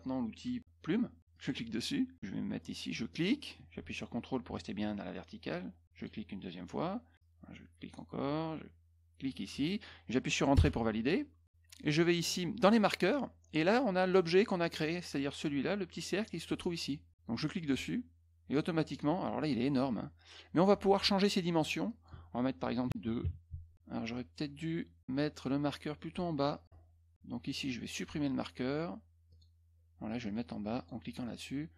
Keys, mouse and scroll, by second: 1.3 click, 3.1 click, 5.9 ctrl+click, 7.8 ctrl+click, 9.2 ctrl+click, 10.5 Return, 12.6 click, 17.5 click, 21.8 click, 23.4 Tab, 27.4 click, 27.9 click, 29.2 click, 30.2 click, 30.7 click.